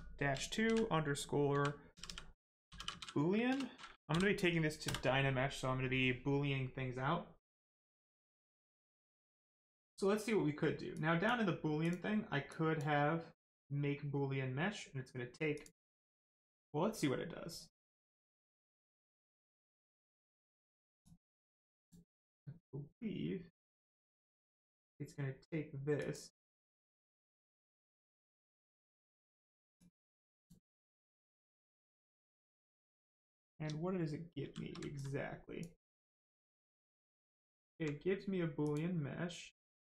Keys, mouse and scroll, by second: 1.5-2.9 typing, 4.1 n, 4.8 Return, 10.9 click, 15.5 click, 21.0 click, 25.9 click, 29.7 click, 32.9 click, 34.3 shift+f, 34.9 alt+click, 35.9 click, 36.0 click, 38.6 click.